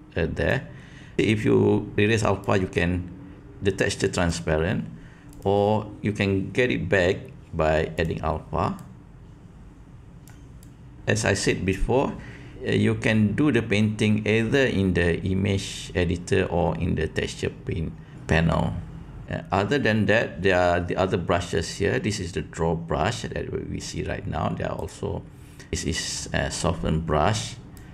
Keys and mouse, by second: 2.5-4.2 drag, 5.2-8.1 drag, 8.8-10.2 drag, 10.7 click, 24.7 click, 27.7 click.